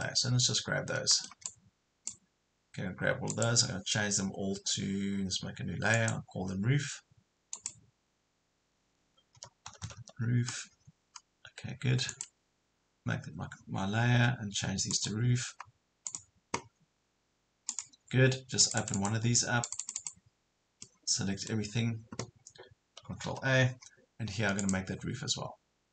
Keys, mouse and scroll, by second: 0.0 middle click, 1.5-8.5 drag, 9.1-10.4 typing, 10.9 Escape, 12.1 click, 17.0 scroll up 1, 17.7 click, 20.9 middle click, 23.3 ctrl+a, 24.6 click.